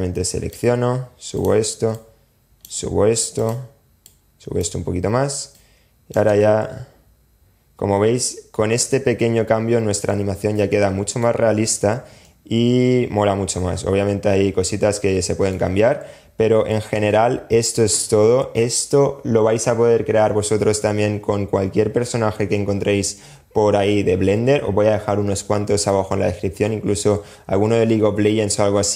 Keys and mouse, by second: 0.5 click, 1.2 click, 1.9-3.2 middle drag, 3.2 click, 3.8-4.7 middle drag, 4.7-5.5 drag, 5.5 space, 8.5-9.3 middle drag, 9.3 click, 10.5 middle click, 11.4 click, 16.1 space.